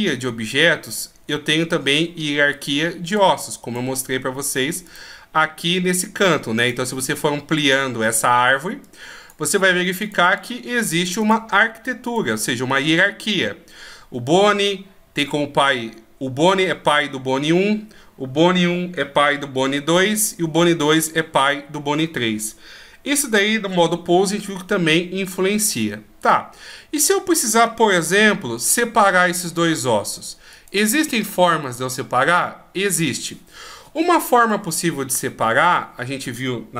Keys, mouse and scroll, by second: 0.9 middle click, 3.1 click, 4.9 click, 6.6 click, 8.8 click, 10.0 click, 12.0 click, 12.4-13.4 scroll down 1, 26.2 right click, 28.6 shift+right click, 30.5 right click.